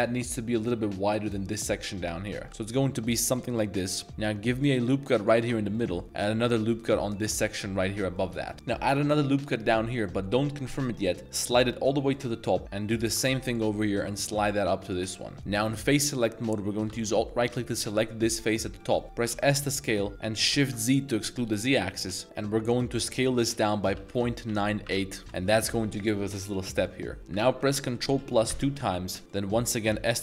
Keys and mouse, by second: 2.1 middle click, 2.4 g, 3.3 click, 3.3 z, 3.5 middle click, 4.0 ctrl+r, 5.2 click, 5.7 middle drag, 6.9 ctrl+r, 7.3-8.1 drag, 8.1-8.5 middle drag, 8.5 middle click, 8.5 a, 8.9 ctrl+r, 12.8 ctrl+r, 15.3 3, 17.4 alt+click, 18.4 middle click, 18.8 middle click, 19.3 s, 20.5 shift+z, 24.5 9, 24.9 8, 25.2 Return, 26.7 middle click, 28.0 ctrl+KP_Add, 28.5 ctrl+KP_Add, 29.2 middle click, 29.9-30.2 typing.